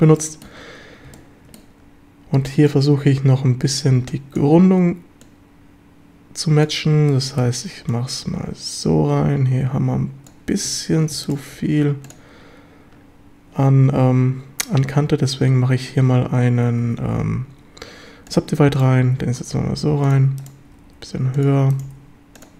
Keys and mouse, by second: 0.2 middle click, 1.2-1.6 middle drag, 2.3 g, 2.6 click, 4.0 b, 5.2-6.6 drag, 7.0 b, 7.9-10.3 drag, 11.6 q, 14.9 q, 17.2 w, 19.1 g, 20.1 click, 20.7 g, 20.9 g, 21.4 click, 21.9 g, 22.4 click.